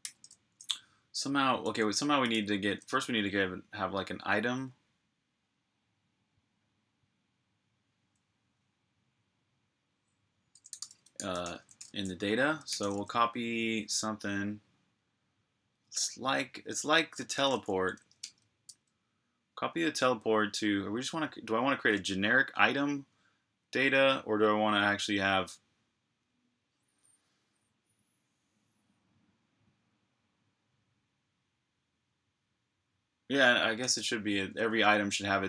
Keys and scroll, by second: 0.1 typing, 1.4-2.7 typing, 10.3-12.5 typing, 17.7 typing.